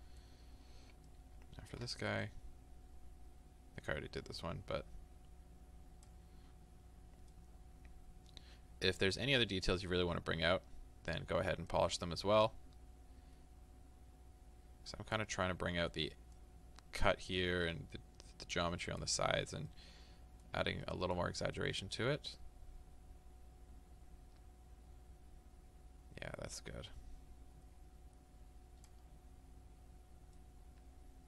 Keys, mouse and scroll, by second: 0.5-1.0 scroll up 2, 2.3-7.4 drag, 6.5-6.9 scroll up 2, 6.9-7.2 scroll down 2, 7.4-11.7 middle drag, 10.4-10.9 scroll down 1, 10.9-11.7 scroll up 2, 11.7-15.5 drag, 15.5 middle click, 16.4-19.7 drag, 19.7-21.6 middle drag, 21.6-30.4 drag, 29.2-29.7 scroll up 2, 29.7-30.4 scroll down 2, 30.4-31.2 middle drag.